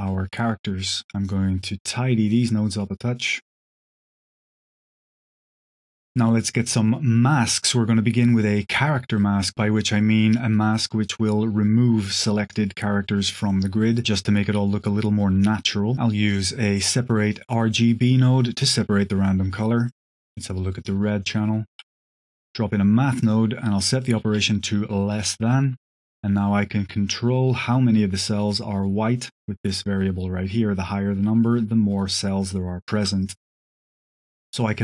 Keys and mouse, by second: 0.0 middle click, 0.9 middle drag, 1.2 click, 1.7 h, 1.9-2.4 drag, 2.6 click, 2.9 click, 3.0-3.4 drag, 3.6-3.9 drag, 4.3 click, 5.1 click, 5.3 drag, 5.7 click, 6.0 click, 8.3 click, 9.1 click, 13.3 click, 13.8 click, 14.3 shift+a, 17.7-18.8 drag, 19.3 click, 19.8 ctrl+shift+click, 20.5 drag, 21.6 q, 23.8 click, 25.7-32.8 drag, 33.1 middle click, 33.5 middle click, 34.1 middle drag.